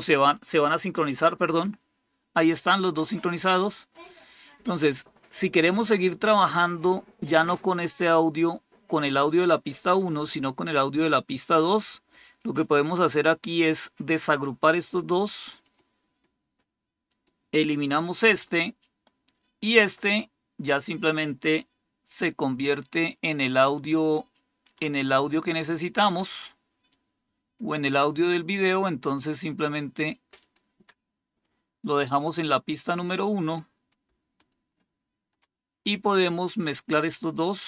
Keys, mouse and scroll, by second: 3.8 click, 12.5 right click, 15.5 click, 17.0 click, 18.2 Delete, 19.7 click, 25.4 shift+click, 26.8-28.4 drag, 29.2 click, 30.3 click, 31.4-32.9 drag, 34.4 shift+click, 37.1 right click.